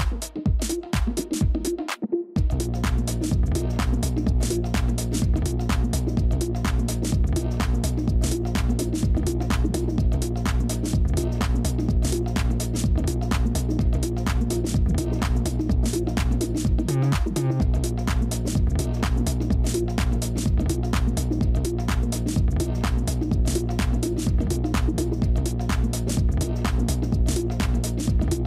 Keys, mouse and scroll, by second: 0.8 space, 4.6 space, 16.7 ctrl+shift+[, 22.2 scroll, 25.7 right click.